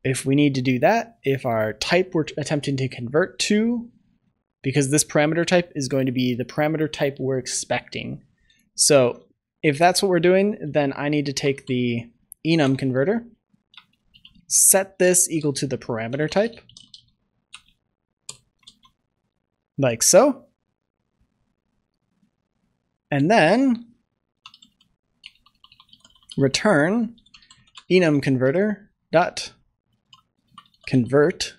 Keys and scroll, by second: 9.0 ctrl+s, 12.6 Return, 13.7 Return, 17.4 Return, 18.6 ctrl+s, 28.2 Return.